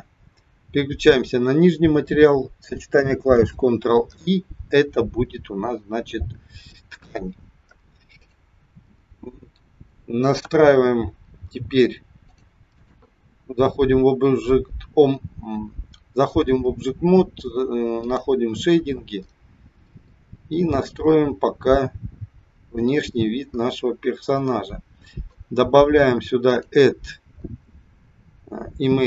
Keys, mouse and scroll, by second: 1.1 click, 3.2 ctrl+i, 6.5 click, 8.2 click, 8.9 middle click, 10.5 KP_1, 12.2 click.